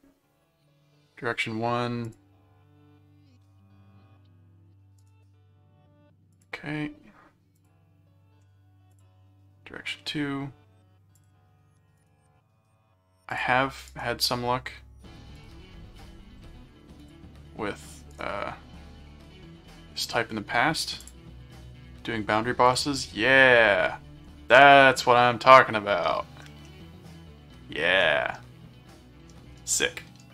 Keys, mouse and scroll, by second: 2.0 click, 5.0 right click, 6.3 click, 7.6 click, 8.9 click, 11.2 click, 12.0 right click, 13.3 click, 14.0 right click, 15.3 click, 16.0 right click, 16.8 scroll up 2, 17.0 click, 18.1 right click, 21.0 click, 22.6 click, 23.1-25.0 middle drag, 25.4 middle click, 26.6 middle click, 28.0-30.3 middle drag.